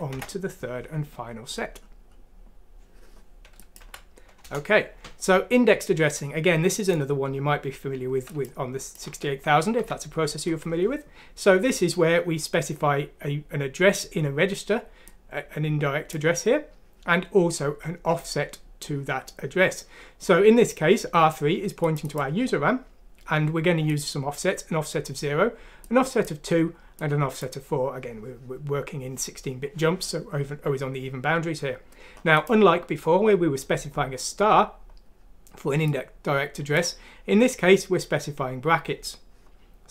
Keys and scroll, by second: 3.8 F6, 4.4 Return, 5.5 typing, 9.0-9.7 typing.